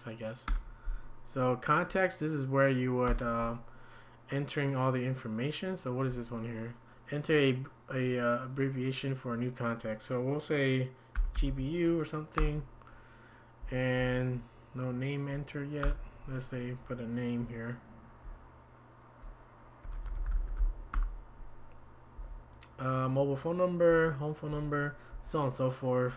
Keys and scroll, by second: 0.5 Return, 3.1 Return, 11.1-12.9 typing, 13.6 Down, 14.0 Up, 15.8 Return, 19.6-21.1 typing, 22.2 Down, 23.9 Down, 24.5 Down, 25.1 Down.